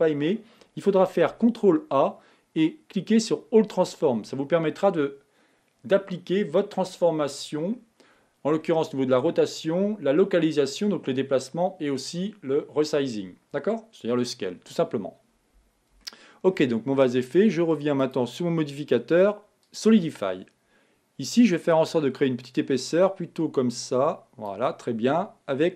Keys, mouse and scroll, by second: 1.8 ctrl+a, 16.4-18.3 shift+middle drag, 18.3-21.3 drag, 21.9-24.9 drag.